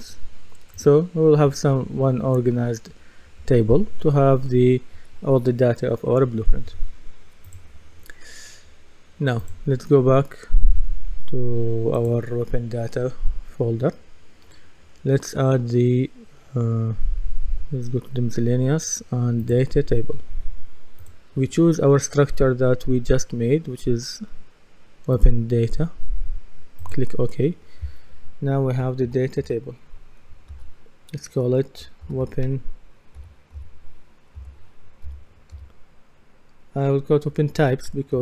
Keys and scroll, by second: 29.0 shift+d, 29.4 shift+t, 31.8-33.2 typing, 34.4-35.5 typing.